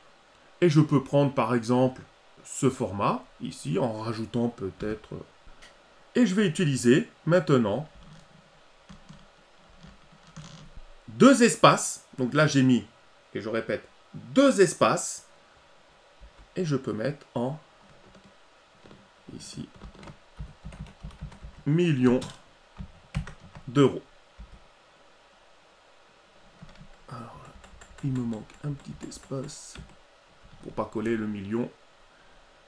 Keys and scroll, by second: 8.1 ctrl+v, 23.1 ctrl+alt+e.